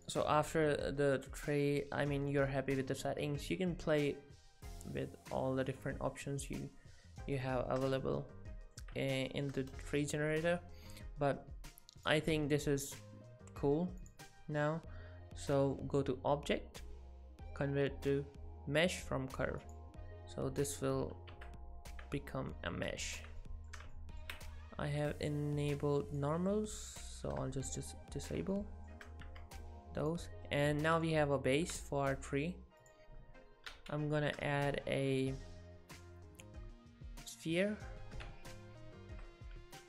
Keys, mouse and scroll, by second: 0.0 click, 6.5 click, 7.5 middle click, 9.1 shift+middle click, 12.0 click, 14.0 click, 20.8-21.2 scroll up 1, 21.3 Tab, 21.3 scroll up 3, 22.5 middle click, 23.4 shift+middle click, 23.9 ctrl+middle click, 24.9 click, 26.9 click, 27.2 middle click, 28.5 shift+middle click, 29.3 Tab, 30.0 click, 31.1 ctrl+middle click, 32.8 click, 33.7 shift+a, 38.3 Tab.